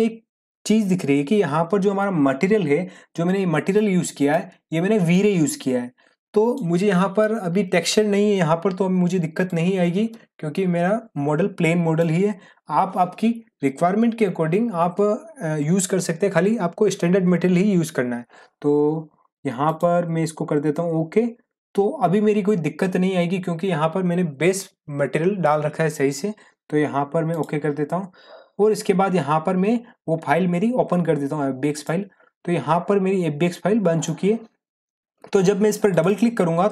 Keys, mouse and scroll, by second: 3.7-4.3 drag, 9.4-12.2 drag, 19.6 click, 27.3 click, 31.7 click, 31.9-34.1 drag.